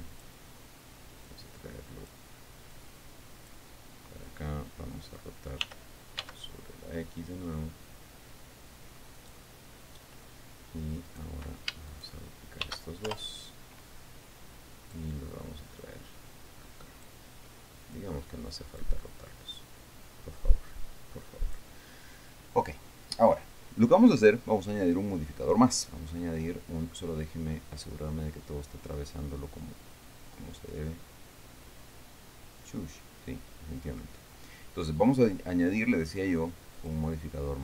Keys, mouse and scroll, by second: 0.0 click, 1.8 click, 3.2 click, 6.2 r, 6.8 x, 9.7 click, 11.6 right click, 12.4 shift+right click, 13.2 shift+d, 13.6 shift+Return, 14.4-15.6 drag, 16.4-17.8 drag, 18.5 click, 20.1-22.3 drag, 23.6 right click, 26.2 click, 27.5-34.7 middle drag, 34.8 scroll up 1, 37.3 click.